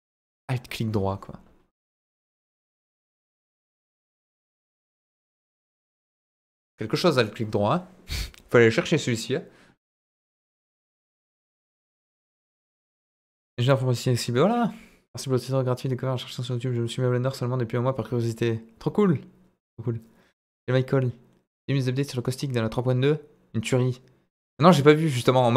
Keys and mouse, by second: 3.1 click, 4.9 click, 6.1 click.